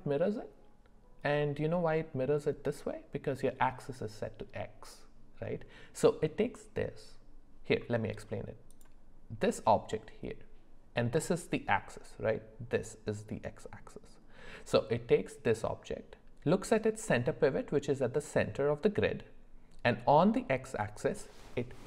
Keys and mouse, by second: 1.4 middle click, 7.8 middle click.